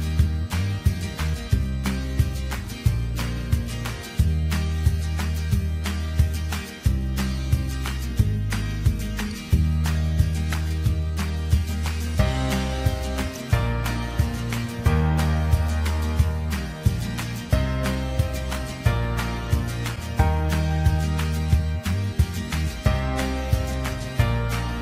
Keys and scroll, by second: 0.7 Return.